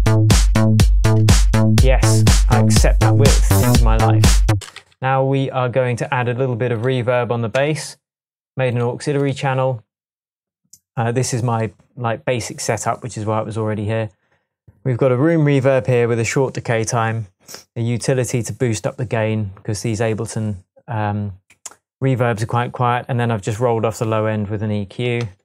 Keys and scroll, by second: 4.5 space, 4.8 super+s, 7.6 Tab, 25.2 shift+Tab.